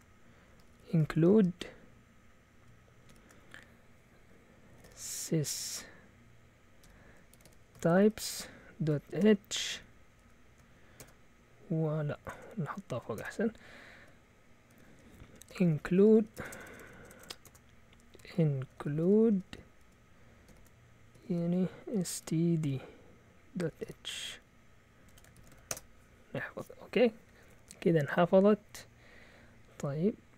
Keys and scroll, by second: 0.0-1.6 typing, 3.1 typing, 4.5-5.4 typing, 6.8-12.3 typing, 12.9 Up, 13.1 Return, 14.7-25.8 typing.